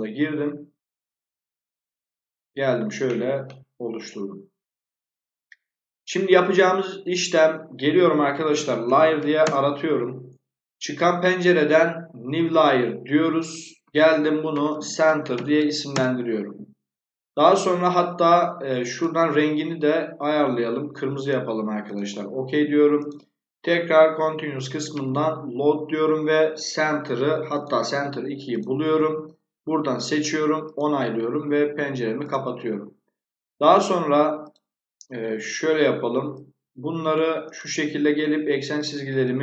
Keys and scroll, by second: 8.0-9.6 typing, 14.2-16.0 typing.